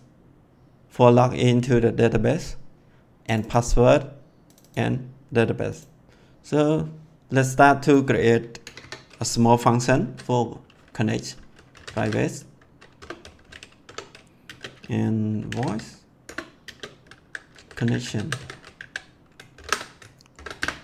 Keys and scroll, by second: 8.6 Return, 11.4-13.2 typing, 13.8 Tab, 14.4-20.3 typing, 16.2 Return, 20.5 Return.